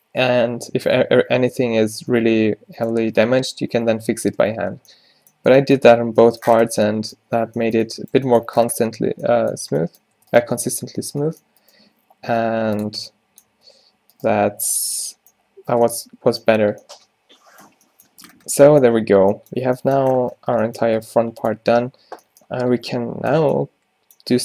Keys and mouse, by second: 1.9 Tab, 4.5 ctrl+z, 5.6 a, 9.7 Tab, 10.3 Tab, 10.5 Tab, 11.9 g, 13.0 Tab, 13.6 Tab, 14.3 g, 14.9 Tab, 19.7 a, 20.5 Tab, 21.0 right click, 21.1 g, 21.6 Tab.